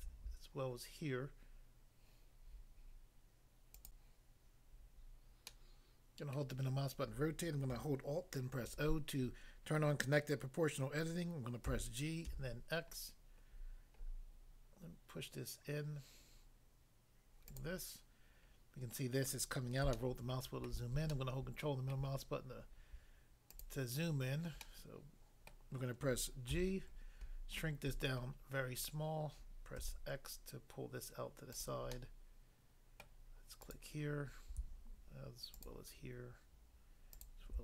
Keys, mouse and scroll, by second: 3.7 click, 3.9 click, 5.5 middle click, 6.3 middle click, 8.7 alt+o, 11.6 g, 12.3 x, 13.5 scroll up 1, 17.4 click, 17.6 click, 18.5 scroll up 1, 19.9 shift+middle click, 23.5 click, 23.6 click, 24.6 middle click, 25.5 middle click, 26.5 g, 26.9 scroll up 1, 27.5-28.0 scroll up 1, 28.3-29.5 scroll up 1, 29.8 x, 31.5 click, 31.7 click, 31.9 middle click, 33.0 middle click, 33.7 click, 33.8 click, 35.5 shift+click, 37.1 shift+click.